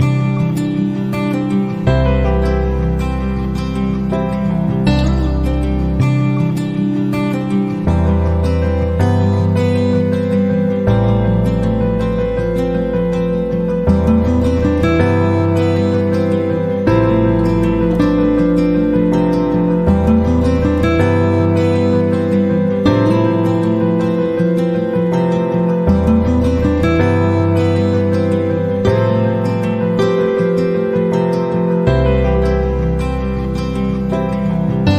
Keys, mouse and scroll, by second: 1.8 click, 3.2 click, 5.1 click, 5.7 click, 6.6 click, 8.6 click, 10.9 click, 13.2 click, 14.5 click, 16.4-17.7 drag, 18.6-20.1 drag, 21.1-22.7 drag, 24.7-26.6 drag, 27.3 click, 28.1 click, 29.7 click, 32.3 click, 33.3 click, 33.9 click.